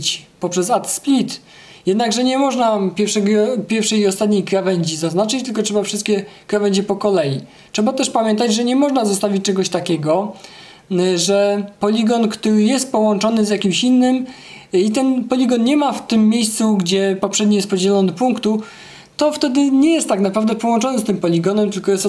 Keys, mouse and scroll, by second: 1.0 click, 2.2 click, 3.8 click, 6.5-8.5 right drag, 9.2-10.3 right drag, 12.4 click, 13.3 click, 14.4 click, 15.8 click, 17.3 click.